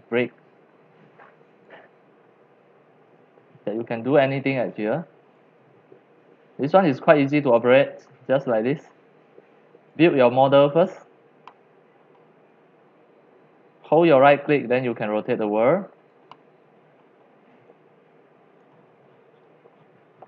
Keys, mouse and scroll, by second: 2.6-3.4 scroll, 4.1-5.3 drag, 6.5-7.6 drag, 10.9 click, 12.2 middle click, 12.9 middle click, 13.1 middle click, 13.3 middle click, 13.5 middle click, 13.8 middle click, 14.2-16.1 middle drag, 16.1 right click, 17.0-18.9 middle drag, 18.3-20.2 scroll, 18.7 right click, 19.1-20.2 middle drag.